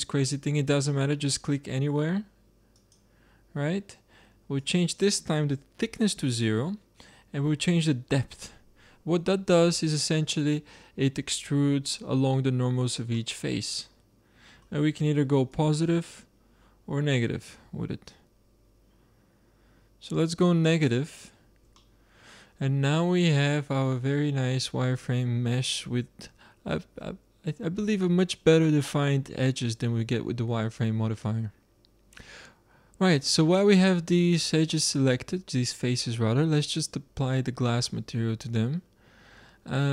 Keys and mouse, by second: 4.5-6.4 drag, 7.7-9.4 drag, 9.7-13.0 middle drag, 13.2-14.3 middle drag, 14.4 middle click, 15.1 middle click, 15.5 click, 17.3 middle click, 21.8 middle click, 22.3 middle click, 23.4 middle click, 24.2-28.3 middle drag, 36.7-38.6 drag.